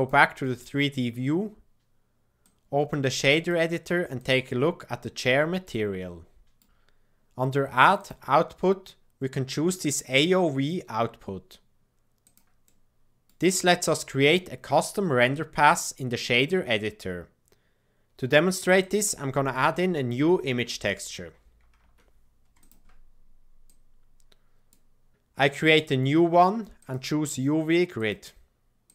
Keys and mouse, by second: 0.0-1.6 middle drag, 1.8 middle click, 2.5-4.0 drag, 4.1 click, 5.8 middle click, 5.9 click, 6.0 middle click, 6.1 click, 6.2 middle click, 6.3 click, 8.1-10.2 drag, 12.6 middle click, 23.6-24.7 drag, 25.6-26.8 drag, 27.8-28.9 drag.